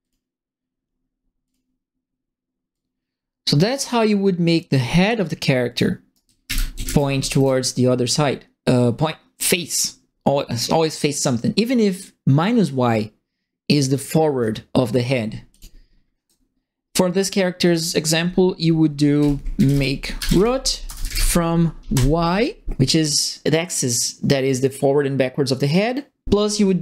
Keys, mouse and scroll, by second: 0.0 click, 1.4 click, 2.7-5.7 drag, 6.0-7.7 typing, 6.1-7.4 right drag, 17.6 click, 18.9-21.9 typing.